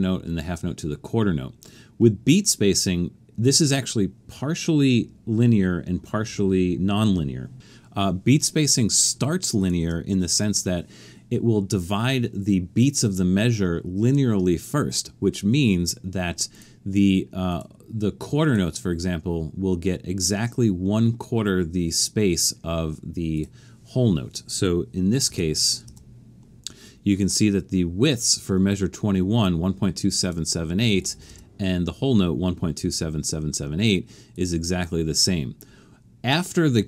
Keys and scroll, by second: 25.9 Return, 31.3 Return.